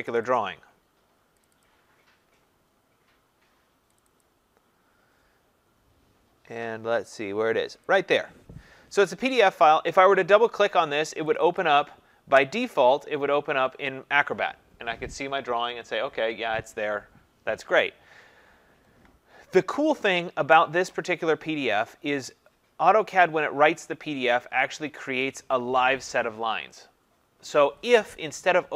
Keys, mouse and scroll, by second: 0.2 click, 0.4 click, 1.4 click, 1.6 click, 2.3 scroll, 4.0 click, 4.2 click, 8.0 click, 11.4 click, 11.6 click.